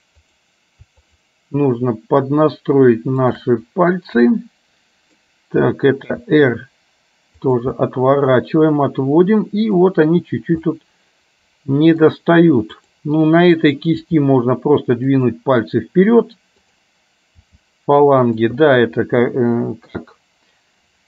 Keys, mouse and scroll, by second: 0.2 click, 1.1 shift+click, 3.4 shift+click, 4.4-5.4 middle drag, 6.1 r, 7.9-9.9 middle drag, 10.7-12.1 middle drag, 12.9 click, 14.1 g, 16.6 click, 17.5 g, 18.7-20.0 middle drag.